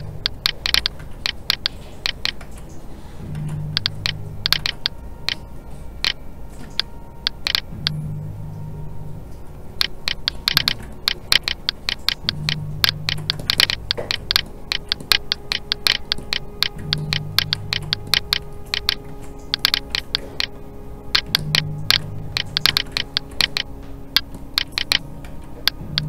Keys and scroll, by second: 2.4 alt+a, 3.3 alt+s, 6.6 alt+a, 19.0 alt+a, 25.2 alt+a.